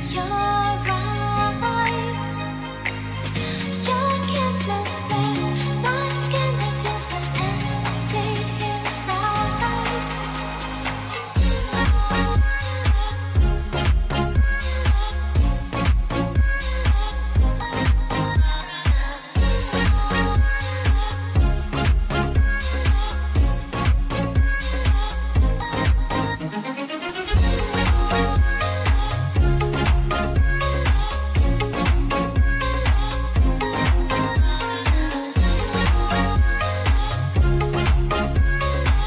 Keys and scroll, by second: 12.6 ctrl+space, 16.6 ctrl+c, 16.9 ctrl+v, 17.3 ctrl+t, 18.4 ctrl+space, 36.2 ctrl+space.